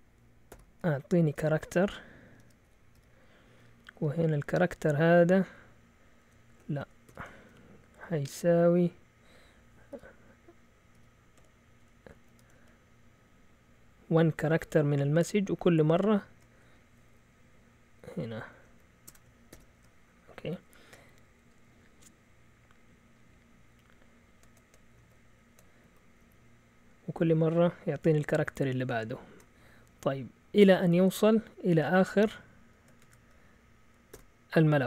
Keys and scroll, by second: 0.5-2.9 typing, 3.8 Down, 4.0 Left, 4.8 c, 6.5-7.6 typing, 9.2-12.5 typing, 15.9 typing, 17.1 Left, 17.7 typing, 17.8 Left, 18.6 Right, 19.0-19.8 typing, 25.0 ctrl+Right, 25.8 Right, 26.2 Right, 28.9 shift+Tab, 33.2-34.1 typing.